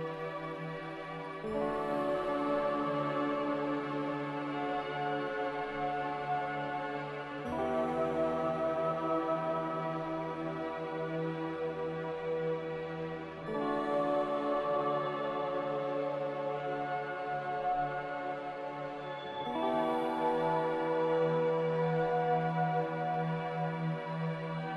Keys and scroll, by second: 2.0 Delete, 2.5 Delete, 8.6 b, 10.6 m.